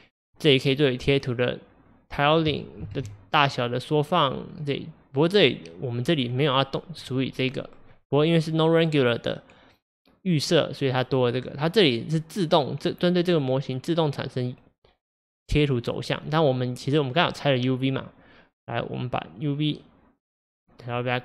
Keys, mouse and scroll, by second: 0.6-2.9 drag, 2.9 ctrl+z, 5.3-21.2 drag.